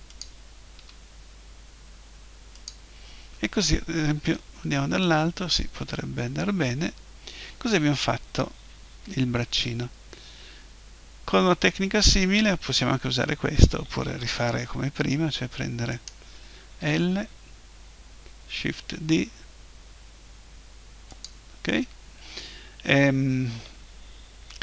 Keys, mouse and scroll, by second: 0.2-2.2 drag, 0.8 g, 2.7-4.4 drag, 4.4 KP_7, 6.0 KP_1, 10.0-15.2 middle drag, 15.9-17.8 right drag, 16.8 l, 18.7 shift+d, 21.2-23.2 drag.